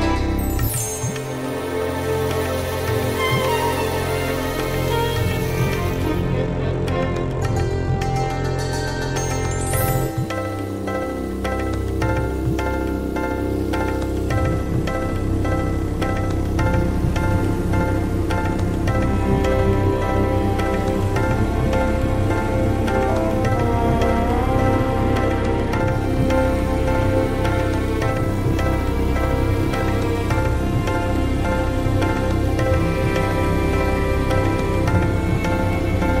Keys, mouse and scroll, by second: 0.6 scroll down 1, 1.8 click, 2.5-3.3 ctrl+scroll down 8, 3.7-5.3 drag, 5.3 scroll down 2, 5.7-7.0 drag, 8.1 click, 8.8-9.9 typing, 10.1 click, 22.1-22.4 scroll up 2, 22.7 scroll up 2, 23.4-24.0 scroll up 4, 24.5 click, 24.8-30.5 drag, 30.9-31.6 ctrl+scroll up 6, 32.1-34.2 scroll up 2, 34.2 click, 35.0-36.2 typing, 36.1 alt+shift+s.